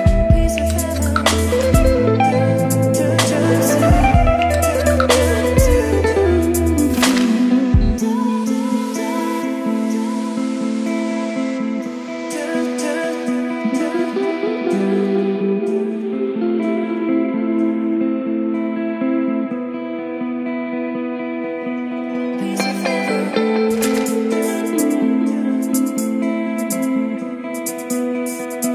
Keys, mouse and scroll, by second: 0.3-1.7 typing, 2.9-4.2 typing, 4.4 Return, 5.4-6.9 typing, 7.3 ctrl+space, 8.0-9.2 typing, 11.0-12.3 typing, 16.8 Return, 17.2-18.1 typing, 19.8-22.3 typing, 24.0-26.1 typing, 27.6 Right, 28.3 shift+], 28.5 Return.